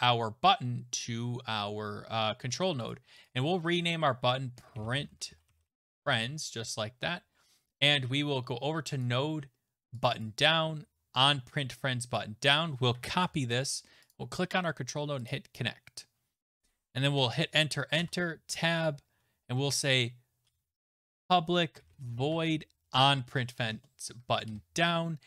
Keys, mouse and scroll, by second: 2.9 click, 3.3 click, 4.3-6.4 typing, 9.0 click, 10.0 click, 10.2 click, 12.5 click, 13.1 ctrl+c, 14.1 click, 15.3 click, 17.1 Return, 17.3 Return, 18.0 Tab, 19.1 typing, 20.5-24.8 typing.